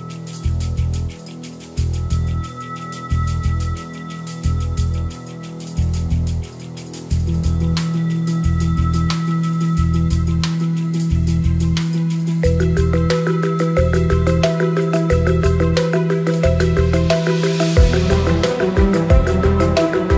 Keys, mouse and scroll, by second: 2.5 click, 3.2-7.6 drag, 7.9 click, 11.2-12.8 drag, 14.7 click, 15.5 click.